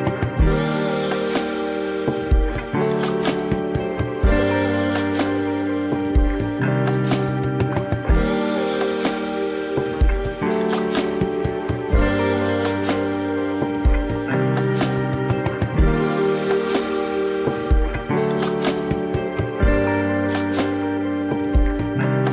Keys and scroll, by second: 5.9 ctrl+=, 6.1 ctrl+-, 6.8 ctrl+=, 7.4 ctrl+-, 7.8 ctrl+=, 8.4 space, 12.5 ctrl+alt+z.